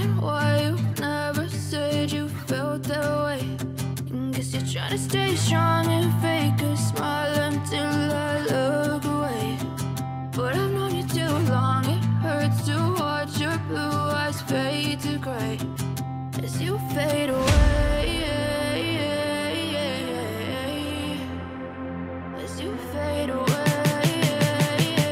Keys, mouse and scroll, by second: 1.4 g, 2.1 right click, 3.8 F9, 5.8 F9, 6.8 right click, 6.8 h, 7.8 right click, 8.5 h, 11.5 F5, 13.7 right click, 14.1 space, 15.8 scroll down 2, 17.9 alt+space, 20.8 space, 21.3 alt+space, 23.9 alt+h.